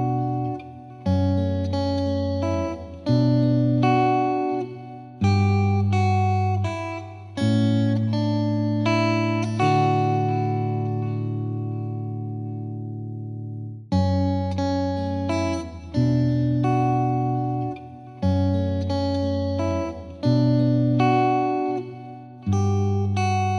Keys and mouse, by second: 2.2 click, 5.3 click, 7.2 click, 9.0 click, 12.3-14.5 drag, 14.8-15.9 drag, 19.2-21.4 drag, 22.6-23.5 drag.